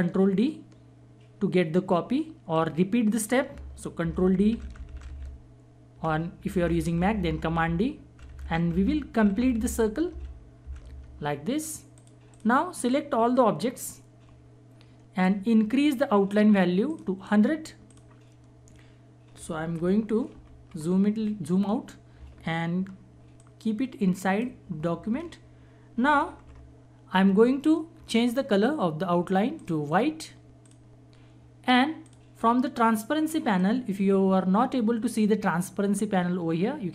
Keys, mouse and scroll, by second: 4.0 ctrl+d, 11.9-17.0 drag, 19.7 ctrl+-, 23.4-26.4 alt+shift+drag, 26.4 ctrl+=, 29.6 click.